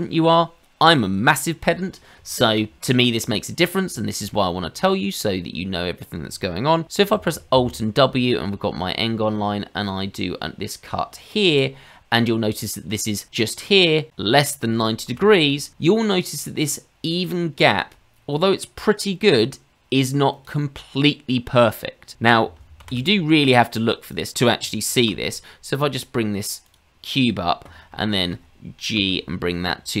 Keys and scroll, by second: 7.1 alt+w, 15.1 ctrl+z, 22.6 shift+a, 25.2 s, 29.0 g.